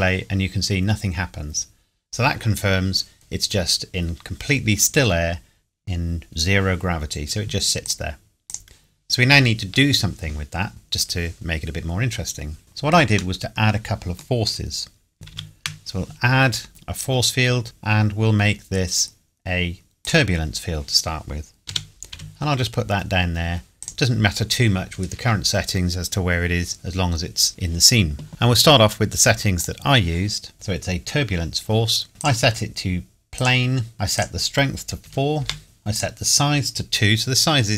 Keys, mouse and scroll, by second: 0.6 scroll up 1, 2.1 scroll down 1, 7.8 scroll down 1, 7.9 click, 12.6 scroll down 1, 13.4 middle click, 15.3 shift+a, 20.0 click, 21.7 g, 22.2 z, 23.8 click, 28.3-29.6 scroll down 1, 29.6 click, 32.2 click, 34.2 click, 35.0 KP_4, 35.4 KP_Enter, 36.0 click.